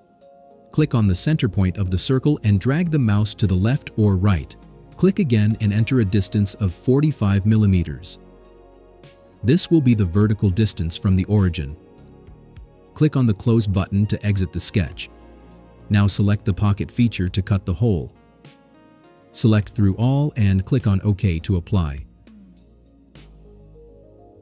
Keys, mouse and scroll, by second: 0.3 click, 2.5 click, 5.0 click, 7.8 4, 8.3 5, 10.3 Return, 14.4 click, 17.6 click, 18.6 click, 20.4 click, 23.7 click.